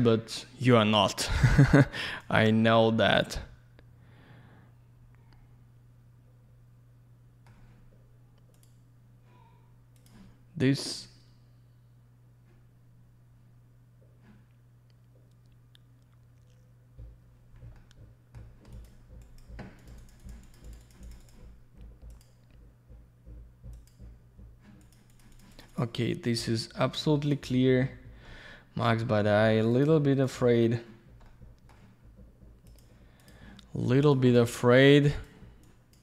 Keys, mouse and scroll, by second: 1.2 click, 2.5 middle click, 3.0 alt+middle click, 8.5 click, 8.6 click, 10.3 click, 17.7 alt+middle click, 18.7 click, 18.8 click, 19.2 click, 19.4 click, 19.8 click, 19.9 click, 20.0 click, 20.1 double click, 20.2 click, 20.3 click, 20.4 click, 20.5 double click, 20.6 click, 20.7 click, 20.8 click, 20.9 double click, 21.0 click, 21.1 click, 21.2 click, 21.3 double click, 22.1 click, 22.2 click, 24.1 click, 24.8 click, 24.9 click, 25.1 click, 25.2 double click, 25.3 click, 25.4 click, 25.5 click, 25.6 double click, 25.7 click, 25.8 click, 26.8 click, 26.9 click, 27.3 click, 27.4 click, 28.3 alt+middle click, 29.7 click, 29.8 click, 30.2 click, 30.3 click, 31.3 alt+middle click, 32.7 click, 32.8 click, 33.2 click, 33.3 double click, 34.0 click, 34.1 click, 34.3 click, 34.3 double click, 35.1 click, 35.2 click, 35.6 click.